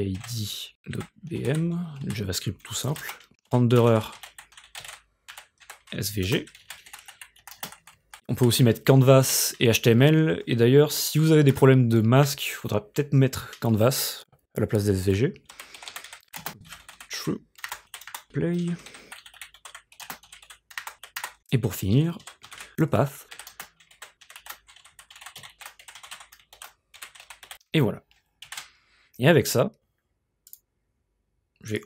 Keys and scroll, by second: 0.0-7.3 typing, 3.0 Return, 9.3 ;, 11.5 Return, 15.3-28.0 typing, 18.1 Return, 21.2 Return, 28.5 ctrl+s.